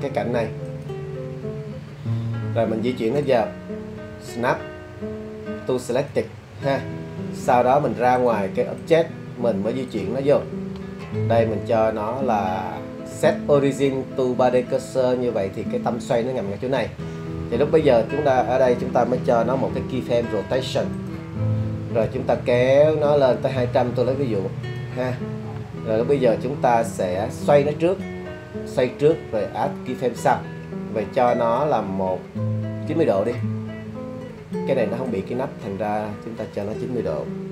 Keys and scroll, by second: 20.1 i.